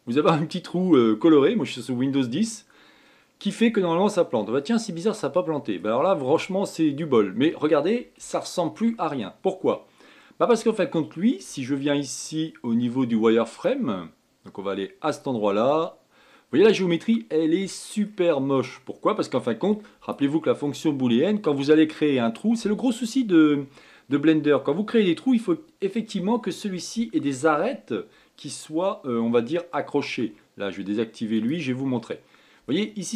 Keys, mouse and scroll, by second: 3.8-6.8 middle drag, 9.0 shift+middle click, 9.8-10.4 scroll up 5, 10.4-12.2 middle drag, 12.2-14.2 scroll up 1, 14.2-17.3 drag, 17.8-18.9 middle drag, 18.9 scroll up 1, 19.0-19.5 scroll down 4, 19.5-22.6 middle drag, 32.0 click, 32.7-33.1 middle drag.